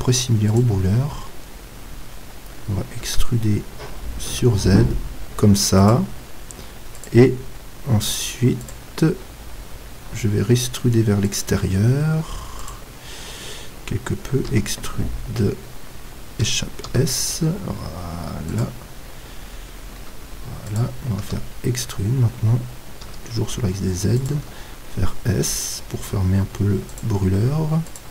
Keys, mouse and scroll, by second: 3.1 e, 5.9-7.2 drag, 14.5 e, 16.9 s, 18.6-20.5 drag, 20.8-23.2 drag, 21.2 e, 24.3-26.3 drag, 24.4 s.